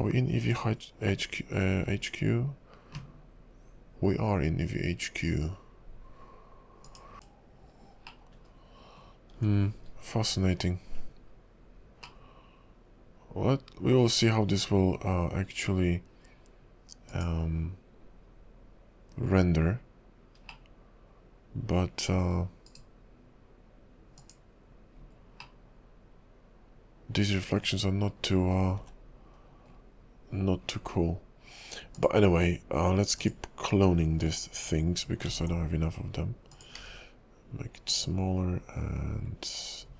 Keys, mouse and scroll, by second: 1.8-4.7 scroll up 2, 6.8 click, 7.1 click, 7.5 click, 8.2 middle click, 9.9 KP_5, 12.2 middle click, 15.4 KP_5, 17.2 click, 20.7 middle click, 22.7 right click, 25.1-25.6 scroll up 3, 25.6 middle click, 28.3-28.9 scroll down 10, 29.3 KP_5, 29.9 scroll down 2, 30.7-31.3 scroll up 7, 32.0 click, 33.2 click, 35.4 alt+d, 36.8 s.